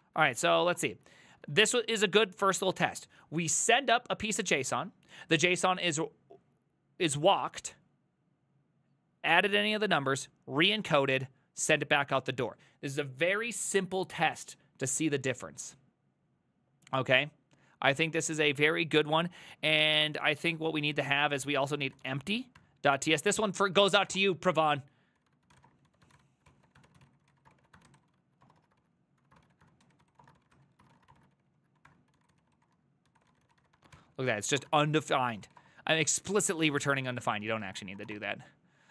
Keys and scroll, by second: 0.0-3.3 typing, 2.3 ctrl+c, 2.5 ctrl+c, 19.9-38.9 typing, 28.8 ctrl+c, 31.1 Return.